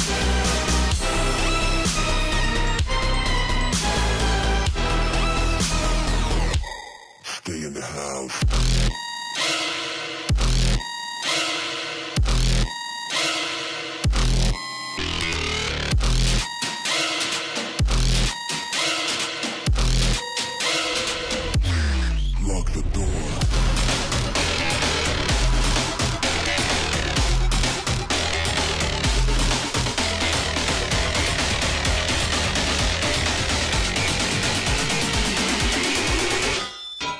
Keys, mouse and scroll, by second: 1.5 alt+scroll down 1, 2.5 click, 3.5 alt+scroll up 1, 3.6 space, 3.7 click, 3.9 space, 4.1 alt+scroll up 1, 4.5-5.7 drag, 5.7 right click, 6.3-6.7 alt+scroll down 1, 6.8-9.4 drag, 9.4 alt+scroll up 1, 9.5 space, 9.6-12.8 drag, 13.1 alt+scroll up 1, 13.6-14.4 alt+scroll down 1, 14.4 alt+scroll up 1, 15.8 click, 17.9 alt+scroll up 1, 18.1 space, 18.1-20.0 drag, 20.0 ctrl+z, 20.4-22.6 drag, 23.1 click, 25.3-29.7 drag, 30.2 alt+scroll down 1, 30.2 click, 31.0 alt+scroll up 1, 31.4 click, 31.5 space, 33.3 i, 33.9 click, 35.0 click, 35.7 ctrl+z, 36.4 click.